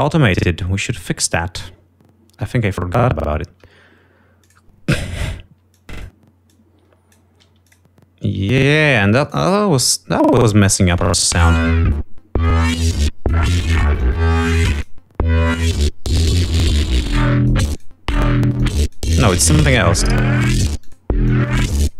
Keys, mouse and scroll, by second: 4.2 click, 5.6 scroll down 2, 6.6 click, 7.3 click, 8.2 d, 8.4 click, 9.3 click, 10.5 click, 11.4 click, 11.5 space, 13.0-14.2 drag, 14.5-15.5 drag, 15.9 click, 16.6 click, 17.3 click, 18.0 click, 18.8 click, 19.4 click, 20.0 click, 20.9 click, 21.3 click.